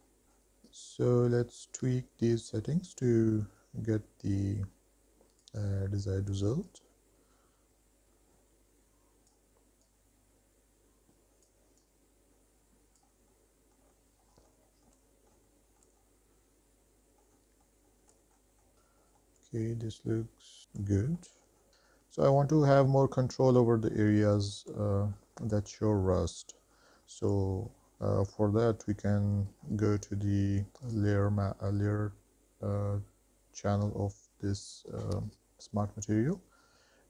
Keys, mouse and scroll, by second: 3.2-5.8 drag, 6.9-8.0 drag, 8.1 click, 8.8 click, 9.3 middle click, 9.5 scroll down 2, 9.7 shift+middle click, 9.9 middle click, 10.2 middle click, 10.8 shift+middle click, 11.0 shift+middle click, 11.3 scroll up 3, 11.5 shift+middle click, 11.7 shift+middle click, 11.8 scroll down 2, 12.6-15.2 drag, 15.3 click, 15.6 click, 16.7-18.1 drag, 18.2 shift+middle drag, 18.4 middle click, 18.7 middle click, 18.7-19.1 scroll down 3, 19.3 shift+middle drag, 19.8-20.9 middle drag, 21.2 middle drag, 22.3-22.9 middle drag, 23.4-23.9 scroll down 4, 23.9 middle drag, 24.4-24.7 shift+middle drag, 25.1 middle drag, 25.7 shift+middle click, 26.4-27.0 middle drag, 27.2 shift+scroll up 1, 27.3 shift+middle drag, 27.7 middle drag, 28.3 shift+middle drag, 29.8 scroll up 2, 31.1 click.